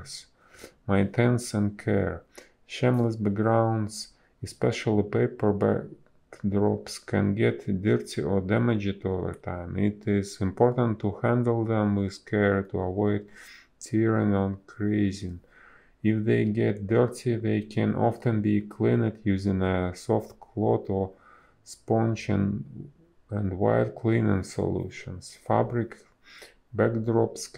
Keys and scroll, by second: 2.1 a, 2.8 Delete, 3.2 b, 4.6 ctrl+z, 7.2 a, 10.4 Delete, 10.7 b, 12.8 ctrl+z, 13.5 ctrl+z, 14.1 ctrl+z, 15.9 ctrl+z, 17.9 space, 19.4 ctrl+z, 19.5 a, 19.9 Delete, 20.3 b, 20.6 space, 22.6 ctrl+z, 24.9 ctrl+z, 25.0 space.